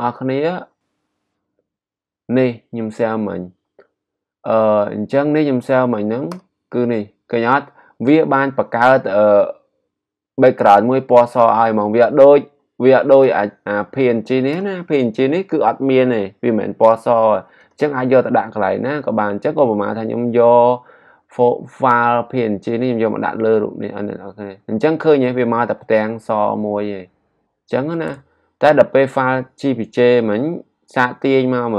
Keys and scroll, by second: 28.0 g.